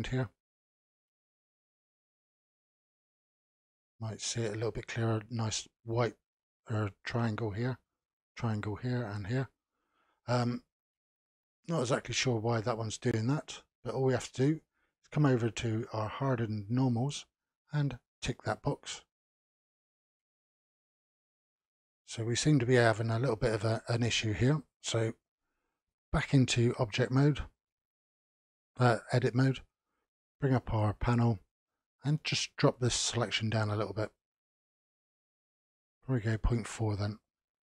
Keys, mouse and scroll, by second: 1.2-1.9 scroll up 4, 1.9-4.9 middle drag, 9.7-10.3 scroll down 3, 10.6-11.9 middle drag, 11.9 click, 12.5-15.5 middle drag, 18.1 click, 19.5-20.4 middle drag, 20.4 scroll up 3, 21.0-26.2 middle drag, 26.2 Tab, 30.1 n, 32.6-36.8 drag.